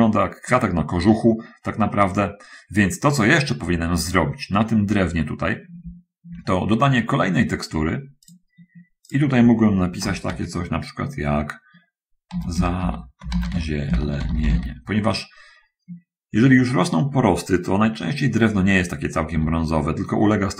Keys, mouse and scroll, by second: 8.6 click, 9.0 click, 12.6-14.7 typing, 19.4 Return.